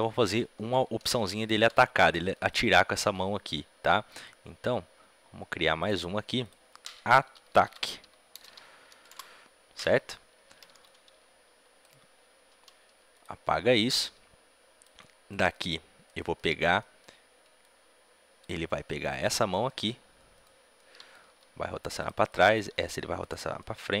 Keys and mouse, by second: 1.8-5.7 middle drag, 5.7-9.0 drag, 13.0 a, 13.0 b, 13.0 x, 13.9-15.2 drag, 15.2 middle click, 15.4 click, 16.0-17.5 middle drag, 17.5-19.4 drag, 19.4 middle click, 20.3-24.0 right drag, 20.9 middle click, 21.2 r, 22.4-24.0 drag, 22.6 r.